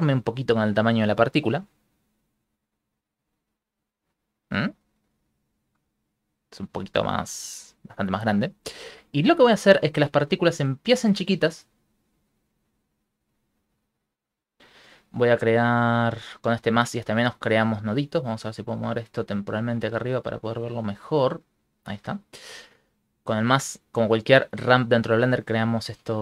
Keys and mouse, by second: 1.0 right click, 1.4 Tab, 2.0 s, 7.9 Tab, 7.9 s, 9.1 right click, 10.5 middle click, 11.7 click, 12.3 click, 15.6 middle click, 19.2 middle click, 20.0 click, 20.9 click, 21.5 middle click, 23.7 click, 23.9 click, 25.3 click.